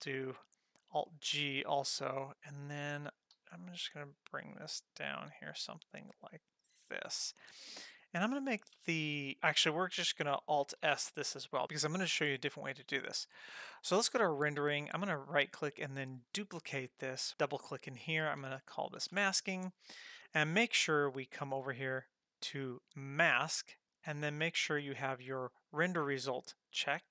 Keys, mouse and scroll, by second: 1.1 alt+g, 2.9 g, 8.2 click, 8.7 Tab, 9.4 click, 10.9 alt+s, 14.2 click, 14.9-16.5 drag, 14.9 right click, 17.3-19.4 drag, 21.5-23.2 drag, 24.5-25.6 drag, 25.7-26.8 drag.